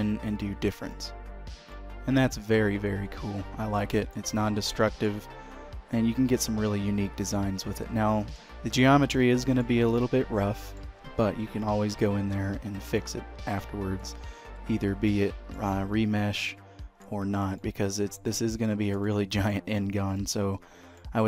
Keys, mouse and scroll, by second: 1.9 middle click, 2.7 typing, 5.0 shift+middle click, 5.3 middle click, 9.0-9.4 scroll up 3, 9.6 shift+middle click, 10.0 middle click, 12.6 h, 13.1 click, 13.5 q, 15.2 middle click, 15.9 Tab, 16.3 scroll up 1, 16.6 shift+middle click, 17.7 middle click, 19.2 shift+middle click, 19.9-21.2 scroll down 3, 20.3 middle click.